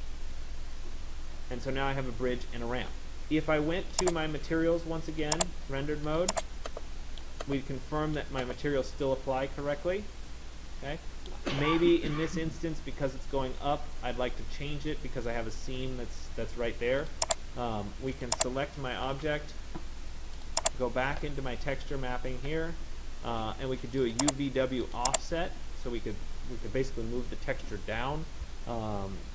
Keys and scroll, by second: 18.9 ctrl+a.